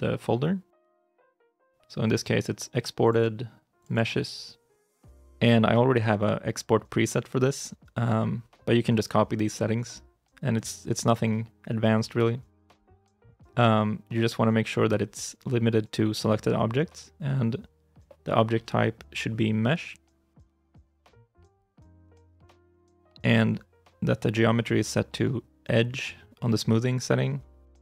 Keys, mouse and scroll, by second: 0.7 double click, 3.0 double click.